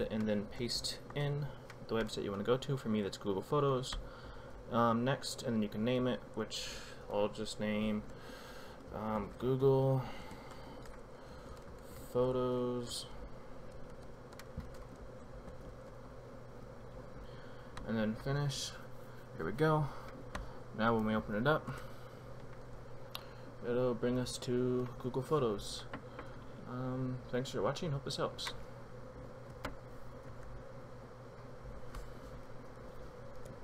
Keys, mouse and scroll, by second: 1.1 ctrl+v, 4.2 click, 8.7-16.2 typing, 18.1 click, 20.2-21.0 typing, 21.7 Return, 28.3 F7, 29.5 F7, 30.3 F7, 33.3 F12.